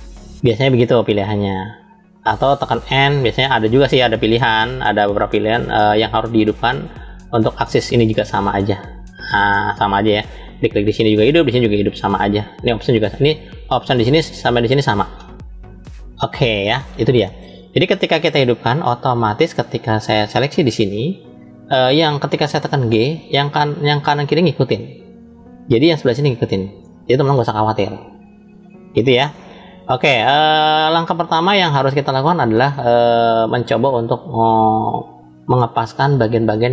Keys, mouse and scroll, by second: 4.9 click, 5.8 click, 8.5 click, 9.1 click, 19.5 click, 20.1 click, 22.6 g, 33.0-36.3 middle drag.